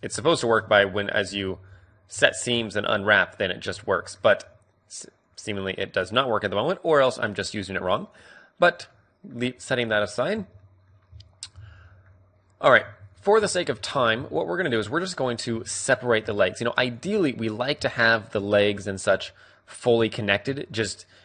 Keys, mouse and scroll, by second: 0.2 middle click, 0.7 ctrl+z, 1.2 ctrl+z, 1.6 ctrl+z, 2.1 ctrl+z, 2.5 ctrl+z, 3.0-5.2 middle drag, 3.7 a, 5.2 click, 5.8-6.9 drag, 7.4-9.4 drag, 9.4-14.6 middle drag, 10.3 a, 13.9 a, 14.6 click, 15.1 middle click, 17.0-18.5 middle drag, 19.6-21.2 right drag.